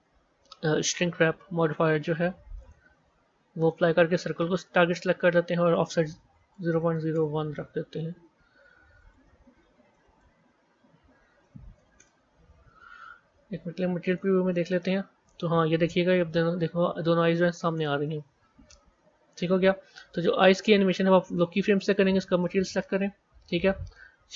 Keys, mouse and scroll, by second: 3.5 click, 5.5 click, 6.5 KP_0, 6.6 KP_Decimal, 8.9-9.9 drag, 9.9 KP_0, 10.0 KP_Decimal, 13.3 z, 14.7-16.2 middle drag, 16.2 a, 16.8 scroll down 2, 17.5 middle click, 18.4 KP_1, 19.7 z, 21.8 click, 23.4-24.3 drag.